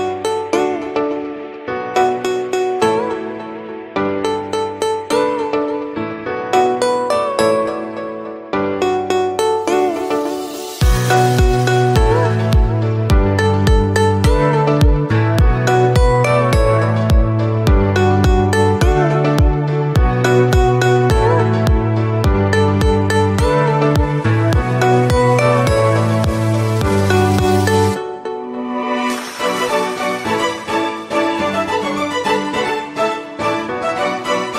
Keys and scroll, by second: 6.8 Escape, 14.1 6, 15.9 Return, 20.1 m, 23.1 Escape, 25.4 Escape, 33.0 Escape.